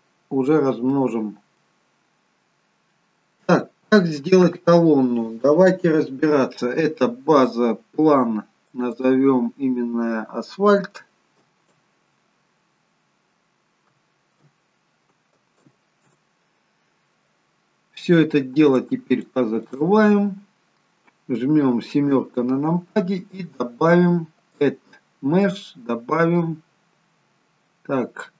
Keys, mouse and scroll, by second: 0.9 middle click, 2.4-3.0 scroll down 1, 3.0-3.7 scroll down 2, 3.7 shift+middle click, 8.7 click, 8.9 click, 18.8 click, 19.2 click, 22.1 KP_7, 24.6 click.